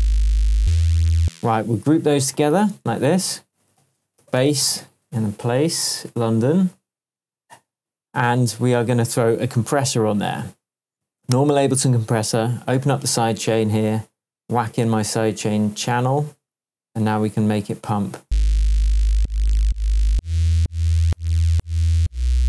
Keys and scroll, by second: 1.2 space, 1.7 shift+space, 2.7 shift+super+g, 3.3 super+g, 3.8 super+r, 4.1-5.0 typing, 5.8 Return, 18.2 space.